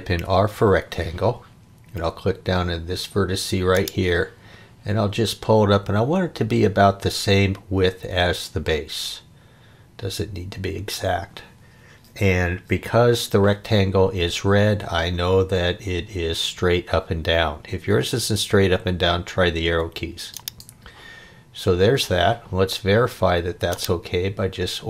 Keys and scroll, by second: 0.1 r.